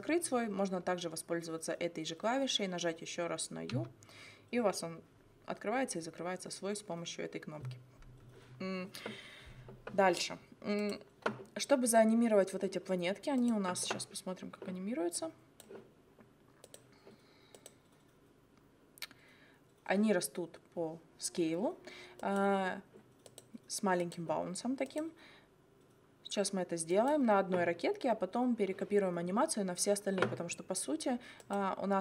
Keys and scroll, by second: 3.7 u.